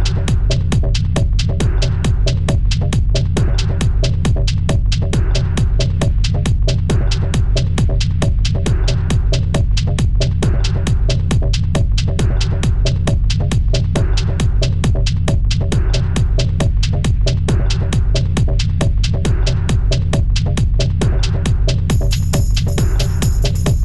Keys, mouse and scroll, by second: 0.9 ctrl+b, 2.0 Tab, 2.2 click, 2.4-3.1 scroll down 3, 3.1 middle click, 3.4-3.9 scroll down 3, 3.9 middle click, 4.2-4.6 scroll down 1, 4.6 middle drag, 4.9-5.5 scroll up 1, 5.5 click, 6.2-7.0 scroll down 3, 7.0 shift+d, 8.4 `, 9.2-9.7 scroll up 3, 9.7 shift+middle drag, 10.0-10.5 scroll up 1, 10.5-10.9 scroll down 2, 10.9 g, 13.6 middle click, 14.5 g, 17.1 middle click, 17.5 `, 18.5-19.0 scroll up 2, 19.0 s, 21.0 g, 22.5 s, 23.7 g.